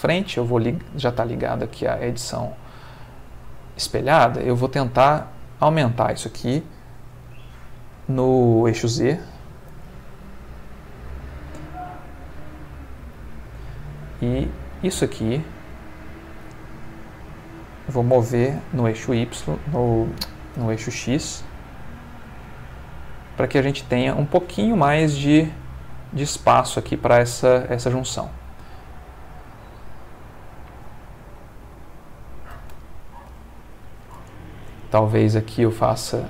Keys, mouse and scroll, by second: 1.7 z, 2.4 z, 3.4 click, 4.6-5.9 drag, 9.6 s, 9.9 z, 12.5 click, 14.3-15.9 drag, 18.6 g, 18.9 y, 20.0 Escape, 20.6 g, 21.0 x, 22.5 click, 25.0-27.7 middle drag, 27.8 Tab, 28.2-30.8 middle drag, 31.7 click, 32.9 ctrl+middle click, 33.7 shift+middle click, 34.3 ctrl+shift+middle click, 34.9 ctrl+Tab, 35.5 click.